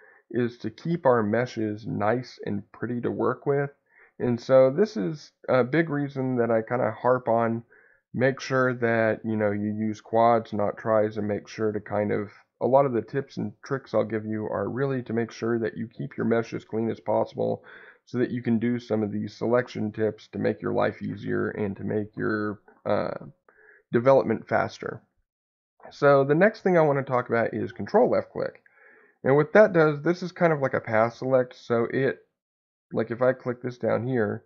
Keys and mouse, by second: 6.6 middle click, 11.1 middle click, 16.6 middle click, 19.4 alt+click, 33.9 ctrl+click.